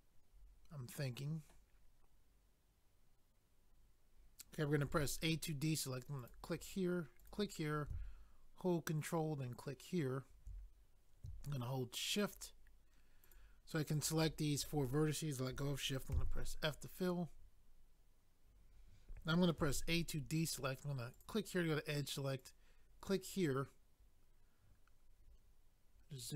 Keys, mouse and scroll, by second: 4.9 a, 6.2 click, 6.3 click, 7.2 click, 7.3 click, 9.0 ctrl+right click, 12.2 shift+click, 13.2 shift+click, 13.9 shift+click, 21.1 click, 21.2 click, 22.4 click, 22.5 click, 23.6 scroll down 1.